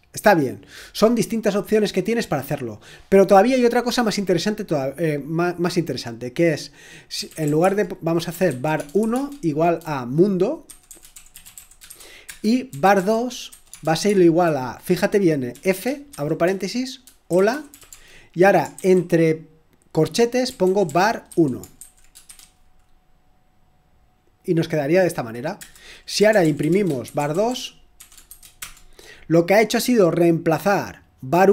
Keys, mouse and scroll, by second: 0.0-0.4 scroll down 2, 2.6 click, 6.9-9.1 typing, 10.4-14.0 typing, 15.5-18.7 typing, 20.2-22.7 typing, 25.6 Return, 25.9-28.5 typing.